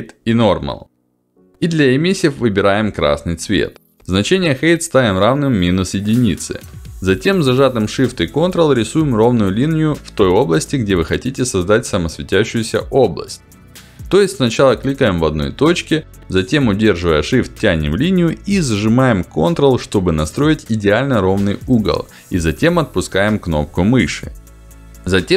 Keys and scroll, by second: 19.6 ctrl+z.